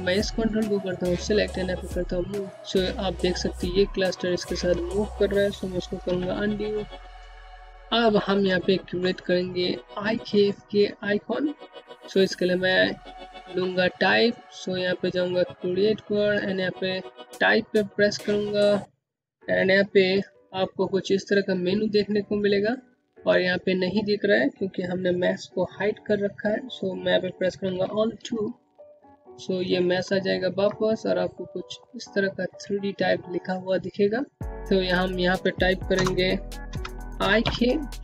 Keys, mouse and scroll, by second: 4.4 click, 5.0 ctrl+z, 7.2 middle click, 9.7 middle click, 13.2 click, 16.4 click, 25.4 click, 26.2 2, 27.7 scroll down 1, 28.0 click, 33.7 click, 34.9 BackSpace, 35.9-36.9 typing.